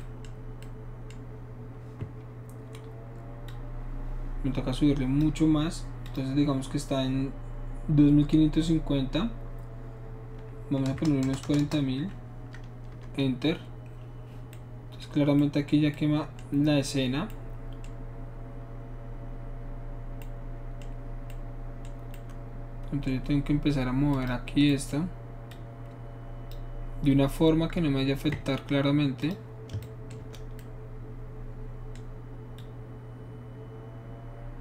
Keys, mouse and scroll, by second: 3.5-5.2 drag, 6.1 click, 10.9-11.6 typing, 12.9 Return, 15.4 middle click, 20.2 middle click, 21.3-22.2 middle drag, 24.1 click, 25.5 click, 29.2 click, 32.6-34.6 drag.